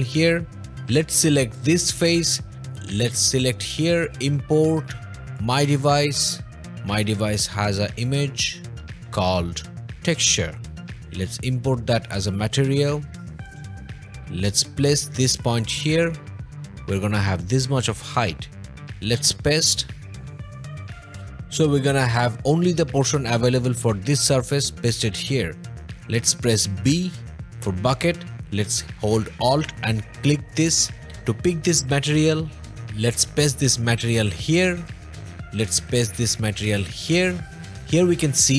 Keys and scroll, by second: 26.8 b.